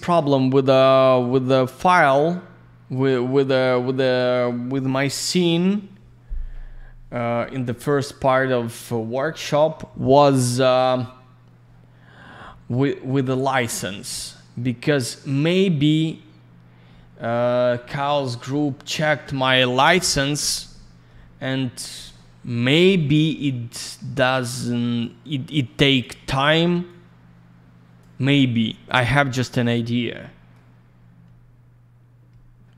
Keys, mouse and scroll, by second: 1.2 click, 23.4 middle click, 24.3 click, 25.5 click, 26.9 click, 28.9 middle click, 29.2-29.7 scroll down 1, 30.2 middle click, 30.7 scroll down 1.